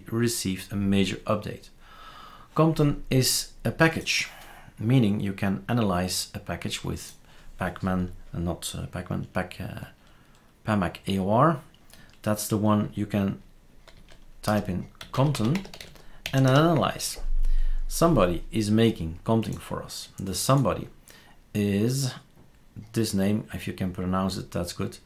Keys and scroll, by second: 13.9-16.7 typing.